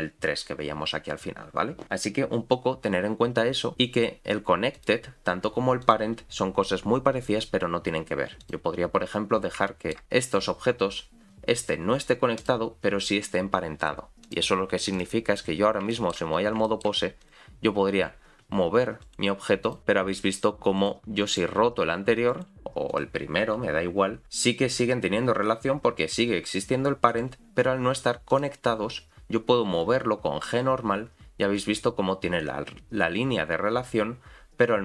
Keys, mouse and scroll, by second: 3.7-4.7 scroll down 3, 4.7 click, 5.8 click, 8.4 click, 9.7 shift+middle click, 10.0-10.5 scroll up 3, 12.4 click, 14.2 click, 15.5-15.9 scroll down 4, 15.9 shift+middle click, 16.3 scroll up 4, 16.6 shift+middle click, 17.2 click, 17.4-18.0 scroll down 1, 18.0-19.6 scroll down 3, 18.0 r, 19.6 click, 19.8 r, 19.8 g, 21.3 click, 21.9 r, 22.9 click, 23.4 r, 28.3 click, 29.7 g.